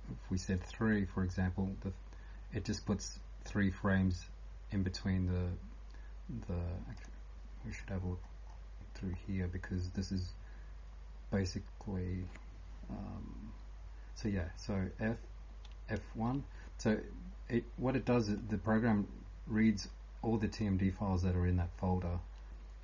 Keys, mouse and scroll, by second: 0.0-22.8 typing, 7.0 click, 7.7 scroll up 2, 8.5 scroll up 8, 9.1 scroll down 1, 12.4 scroll up 1.